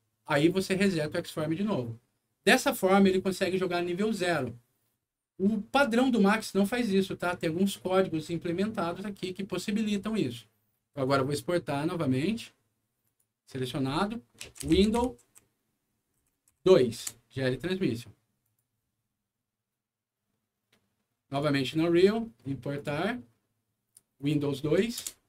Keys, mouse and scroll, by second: 0.6 click, 11.0 click, 13.0 click, 14.1-16.5 typing, 17.0 Return, 18.4 click, 21.3 click, 21.9 right click, 22.7 click, 24.1 click, 24.9 Return.